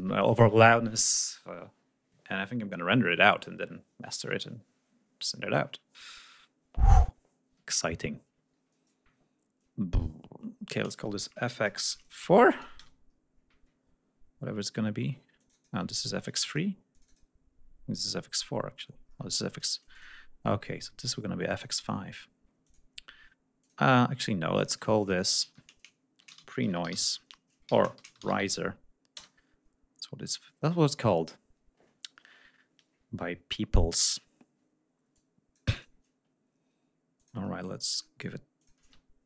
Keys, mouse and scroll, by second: 10.9 shift+f, 11.5 shift+x, 11.9 shift+space, 12.1 shift+4, 12.6 shift+Return, 13.1 scroll up 2, 14.0-14.3 scroll up 2, 17.6-18.4 scroll up 4, 18.9 scroll down 2, 19.7 click, 20.4 scroll down 2, 20.6 scroll up 2, 21.3 click, 22.4 click, 23.4 click, 23.8 scroll up 1, 24.4 click, 24.8 click, 25.2 ctrl+a, 26.0-26.6 typing, 27.5 ctrl+a, 27.8 ctrl+shift+r, 27.9 ctrl+shift+i, 28.0 s, 28.1 e, 29.0 Return, 29.9-30.2 scroll down 2, 30.7 scroll down 2, 34.9 click, 37.0 click, 37.7 click, 38.4 click.